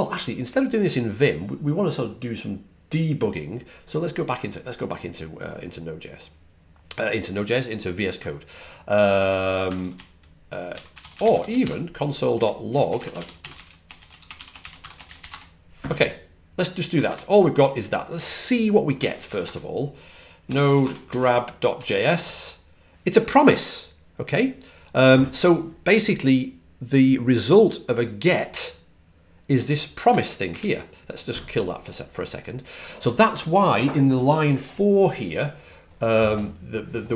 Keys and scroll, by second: 9.2-13.9 typing, 16.7-17.4 typing, 19.0-21.6 typing, 29.9 typing.